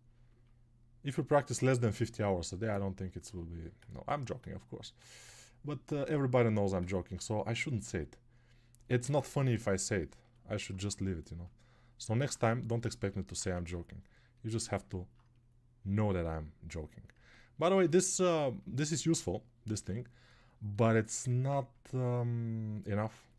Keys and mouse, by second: 13.7 ctrl+1.